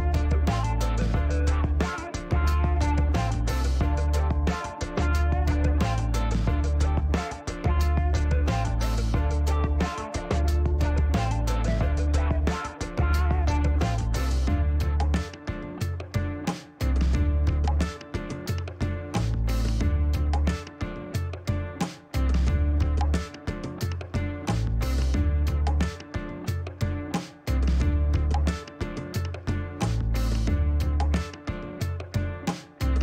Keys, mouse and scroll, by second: 0.9 click, 1.8 click, 3.0 click, 4.4-6.2 drag, 6.6 click, 8.7 click, 12.2 click, 13.9 click, 14.5 right click, 15.8 click, 16.4 Delete, 17.4 click, 17.7 Delete, 18.5 click, 20.2 click, 22.5 click, 24.0-25.4 drag, 25.6 click, 26.9 click, 28.6 click, 31.2 click, 32.1 click.